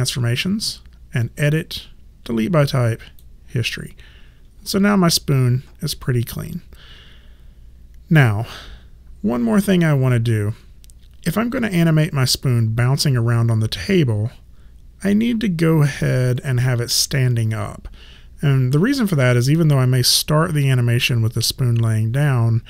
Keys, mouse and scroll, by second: 1.2 click.